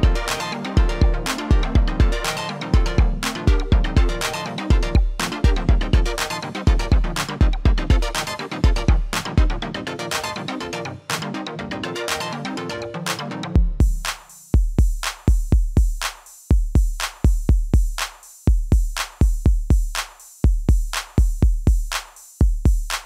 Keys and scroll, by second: 5.9 w, 16.9 typing.